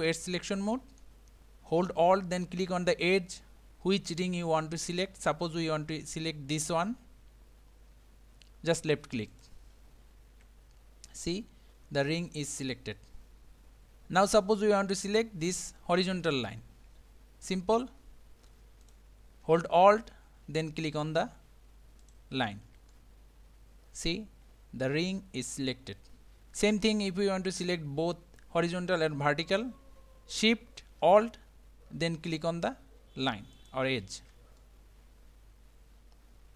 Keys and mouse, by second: 0.1 middle click, 11.2-13.8 middle drag, 18.8 click, 22.9-26.2 middle drag, 33.5 alt+shift+click, 34.6-36.5 middle drag.